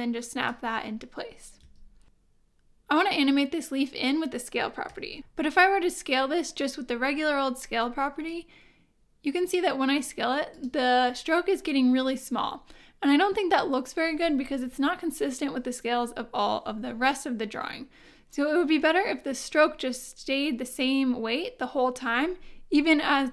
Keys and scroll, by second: 1.6 super+v.